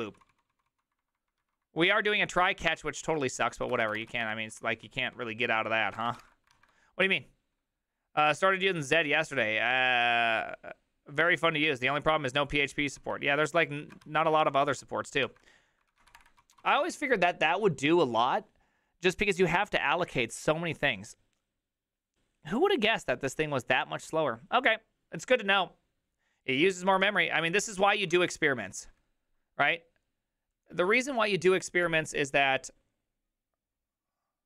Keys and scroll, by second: 0.0-4.4 typing, 3.0 ctrl+u, 3.4 ctrl+u, 4.5 ctrl+d, 5.1 ctrl+d, 5.8-6.7 typing, 13.8 alt+{, 13.8 ctrl+a, 14.0 3, 14.6 ctrl+a, 15.2-18.4 typing, 20.0-20.8 typing, 23.8-27.1 j, 27.1 alt+{.